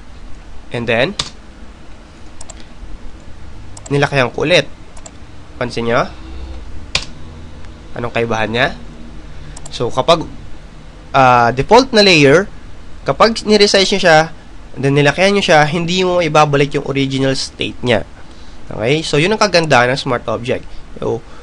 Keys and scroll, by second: 1.4 Return, 6.6 Return.